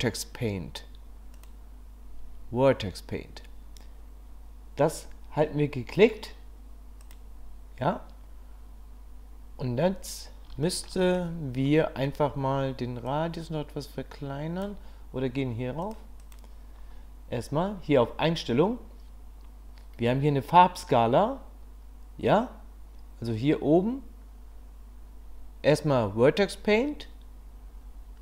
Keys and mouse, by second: 7.0 click, 10.6 shift+middle click, 11.7 middle click, 13.1-15.9 drag.